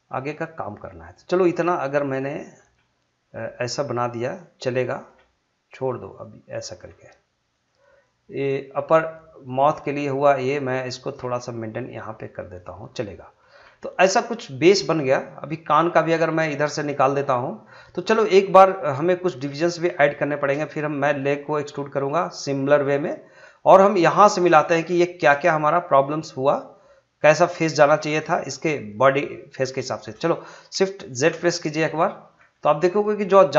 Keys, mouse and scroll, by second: 0.1 g, 1.2 click, 2.6 g, 4.1 click, 5.1 g, 5.7 click, 6.9 g, 7.5 click, 8.4 g, 10.2 click, 11.2 g, 12.4 click, 13.5-15.0 scroll down 1, 16.9 scroll up 1, 17.0 click, 18.6-19.2 scroll down 1, 19.9-23.8 shift+middle drag, 23.8 scroll up 1, 24.2 shift+middle click, 25.1-27.5 shift+middle drag, 27.5 scroll down 1, 27.8-29.9 middle drag, 29.9 shift+middle click, 30.2 middle click, 31.2 shift+z, 31.6 middle click, 32.2 scroll up 1, 32.5-33.5 shift+middle drag.